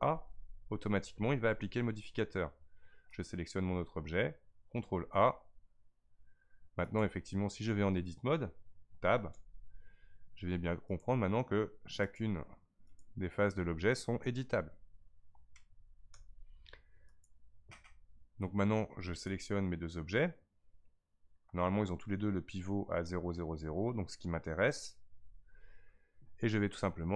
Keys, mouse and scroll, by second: 0.0 ctrl+a, 3.1 click, 5.3 ctrl+a, 6.8 click, 9.3 Tab, 10.9 click, 12.0 click, 12.8 click, 16.1 Tab, 17.1 click, 19.2 shift+click.